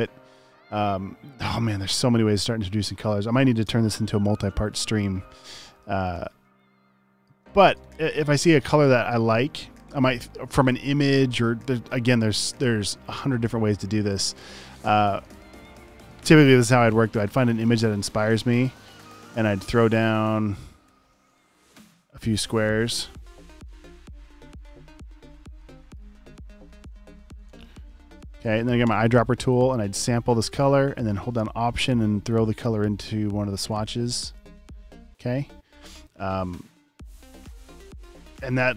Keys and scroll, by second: 5.7 super+v, 7.4 space, 15.8 m, 18.5 v, 20.9 BackSpace, 27.3 super+d.